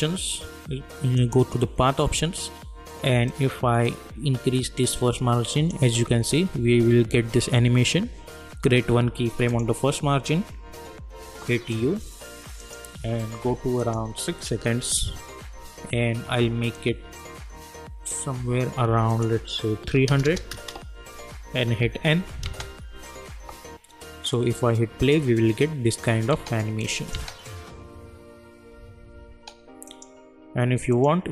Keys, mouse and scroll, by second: 1.9-2.4 scroll down 1, 3.3-6.3 drag, 6.3 ctrl+z, 9.5 click, 11.2 u, 12.6 click, 13.0 u, 13.8 click, 14.8 k, 16.7-19.1 drag, 20.5 Return, 21.8 n, 22.4 space, 26.3 space, 26.8 click, 27.4 space, 29.9 click.